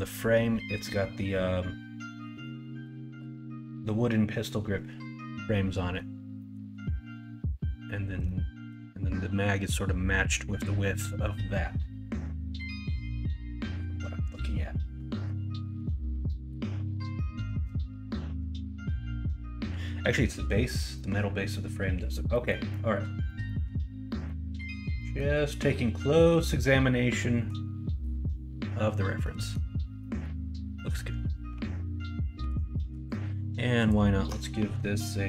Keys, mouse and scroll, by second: 5.7-6.5 scroll up 4, 6.5-7.6 scroll down 2, 7.6-8.3 scroll down 1, 8.3-8.6 scroll up 2, 8.6 middle click, 29.3 middle click, 30.0 middle click, 30.8 middle click, 32.3 2.